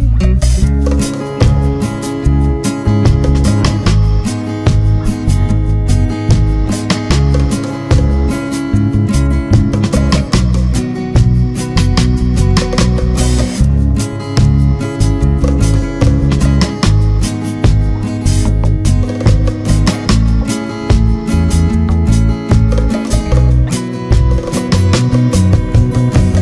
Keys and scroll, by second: 0.2 Down.